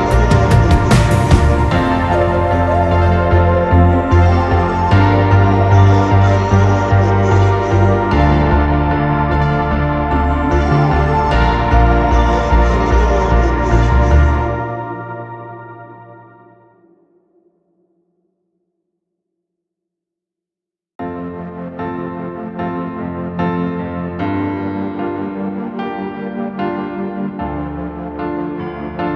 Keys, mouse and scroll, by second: 0.0-0.8 typing, 1.8-7.3 typing, 6.7 scroll down 1, 8.4-8.7 typing, 9.7 typing, 10.6 scroll down 2, 11.5-11.8 typing, 11.7-12.0 scroll down 2, 12.0 click, 12.6 click, 14.4 middle click, 15.1 ctrl+s, 15.4 middle click, 15.4 scroll down 2, 15.7-16.0 scroll up 1, 16.0 middle click, 16.2 r, 17.4 space, 18.8 space, 21.0-23.9 typing, 22.6-22.9 scroll down 2, 25.4 m, 26.9 scroll down 2, 27.2 space.